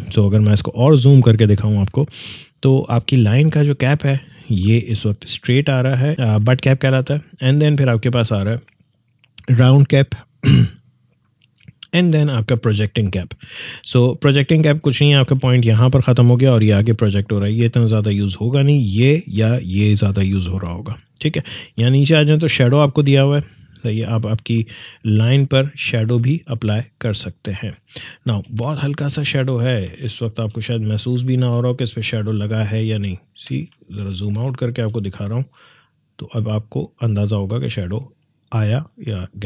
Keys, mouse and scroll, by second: 2.3 click, 9.5 click, 12.7 click, 18.6 click, 25.6 click, 28.8-29.2 alt+scroll down 1, 30.0-30.4 alt+scroll down 1, 31.1 alt+scroll down 1, 32.2 space, 32.5 click, 32.7 space, 33.8 alt+scroll down 1, 34.6 alt+scroll down 1, 35.2 space, 35.5 click, 35.7 space, 37.5-39.4 drag.